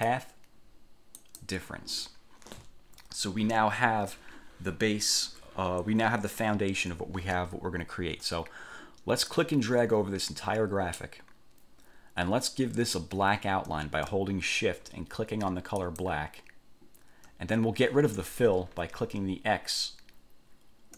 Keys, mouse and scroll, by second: 0.1 click, 1.3 click, 9.5-11.3 drag, 16.0 shift+click.